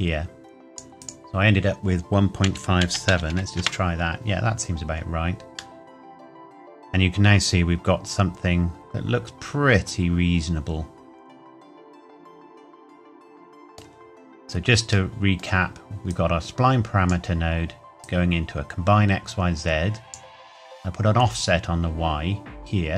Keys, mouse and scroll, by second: 2.4 KP_1, 2.8 KP_Decimal, 3.1 KP_5, 3.3 KP_7, 3.5 KP_Enter, 5.7 middle click, 14.3-15.1 scroll up 1, 15.1 middle click, 15.3-15.9 scroll up 1, 16.1 click.